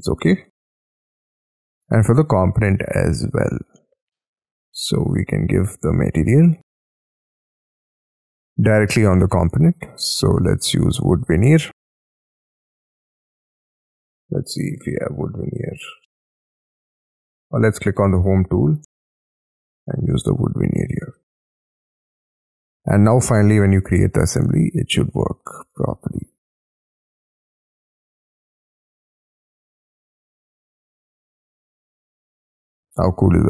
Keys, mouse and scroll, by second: 7.7 middle click, 8.2 middle click, 8.7-9.2 scroll up 8, 9.5 space, 10.3 double click, 10.5 double click, 10.8 double click, 11.0 double click, 11.2 double click, 11.3 b, 17.8-18.3 scroll down 7, 18.3-18.6 scroll up 4, 18.6-21.0 scroll down 3, 21.0 space, 21.2 Escape, 21.5 Escape, 21.7-23.0 scroll down 23, 21.8 Escape, 23.0 Escape, 30.2-31.4 scroll up 17, 31.4 middle click, 33.3 scroll down 3.